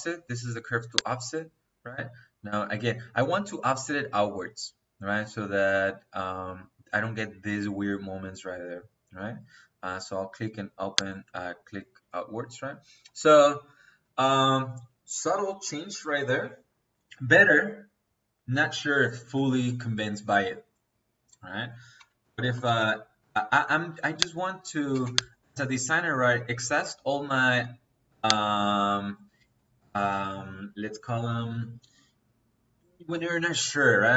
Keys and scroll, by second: 21.4 Escape, 21.9-22.7 typing, 24.8 space.